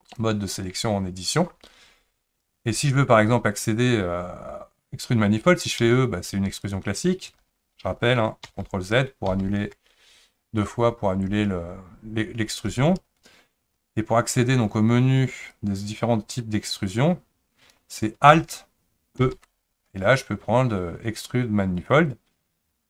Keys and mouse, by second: 0.1 click, 5.9 e, 8.5 ctrl+z, 9.3 ctrl+z, 15.5-17.2 drag, 19.2 alt+e.